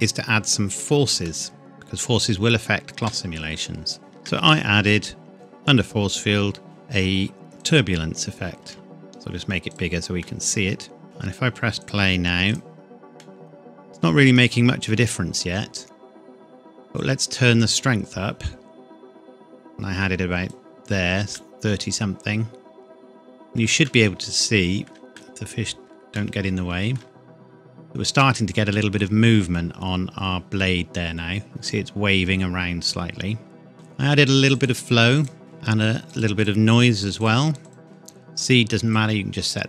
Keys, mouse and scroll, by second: 1.3 middle click, 3.2-3.6 scroll up 1, 4.0 shift+a, 7.6 click, 8.6 s, 9.7 click, 10.3 middle click, 11.8 click, 13.2 middle click, 14.0 scroll up 1, 17.0 click, 21.4 middle click, 27.2-27.9 scroll up 1, 28.2 middle click, 29.6 scroll up 1, 30.3-32.4 scroll down 1, 34.6 click, 36.1 click.